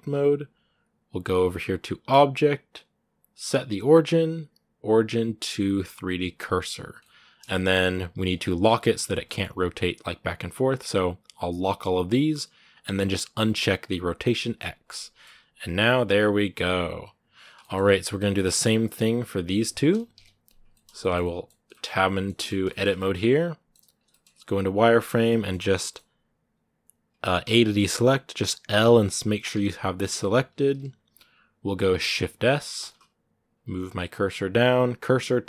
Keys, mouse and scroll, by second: 6.8 middle click, 7.2 scroll down 2, 7.6 r, 8.2 middle click, 8.4 r, 9.0 middle click, 9.3 r, 11.1-14.6 drag, 14.6 scroll down 3, 14.7 middle click, 15.1 r, 17.4 shift+middle click, 17.5 shift+scroll up 2, 18.0 right click, 18.2 shift+middle click, 18.7-19.9 right drag, 19.9 KP_Decimal, 20.5-21.7 shift+middle drag, 21.7 scroll up 1, 21.9 middle click, 22.2 Tab, 22.4 shift+middle click, 22.7 scroll up 1, 22.7-24.0 middle drag, 24.0-25.1 shift+scroll up 3, 24.4 z, 25.1-27.2 middle drag, 27.2 a, 27.4-28.6 middle drag, 28.6 l.